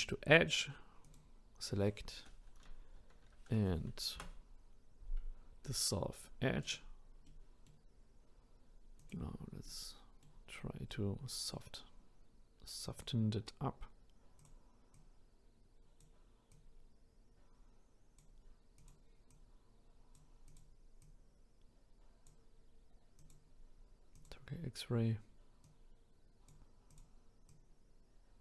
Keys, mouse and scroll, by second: 1.0 click, 9.0 click, 9.6-12.9 middle drag, 12.9 click, 13.5-14.4 scroll up 2, 14.4 click, 14.9 click, 16.5-18.9 drag, 19.3 click, 20.5 click, 21.0 click, 23.2 click, 24.1-25.9 drag, 26.9 click, 27.5 click.